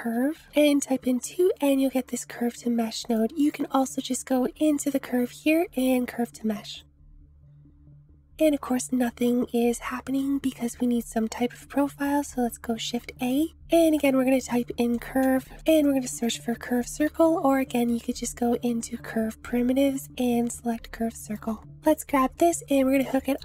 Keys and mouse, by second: 3.5 click, 3.7 shift+a, 9.2-9.9 drag, 10.2 shift+drag, 12.8 shift+a, 17.3 shift+a, 21.8-23.4 drag.